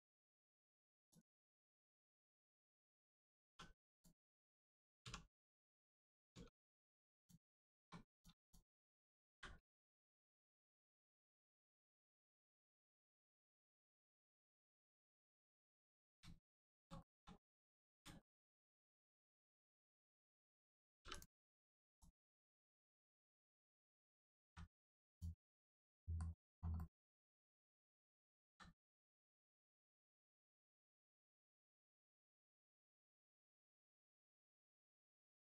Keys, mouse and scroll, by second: 0.6 Tab, 1.0 click, 1.6 Tab, 2.1 click, 2.5 middle click, 3.4 1, 3.9 click, 5.0 1, 5.4 click, 5.9 middle click, 6.3 Tab, 7.1 click, 8.1 click, 8.4 shift+click, 10.2 click, 11.5-11.9 scroll down 1, 12.0 middle click, 12.8 shift+middle click, 13.1 middle click, 13.2 middle click, 13.8 scroll up 1, 14.2 shift+middle click, 14.8 middle click, 14.8 middle click, 16.3 shift+middle click, 16.7 scroll down 1, 17.0 shift+middle click, 17.4 middle click, 17.4 middle click, 18.2 shift+middle click, 18.5 middle click, 18.6 middle click, 19.0 scroll down 1, 20.2 click, 21.0 3, 21.1 click, 21.6 middle click, 22.0 click, 22.4 middle click, 22.6 Tab, 23.0 click, 25.5 middle click, 28.4 ctrl+z, 29.0 middle click, 29.0 middle click, 30.4-31.8 scroll down 1, 31.8 click.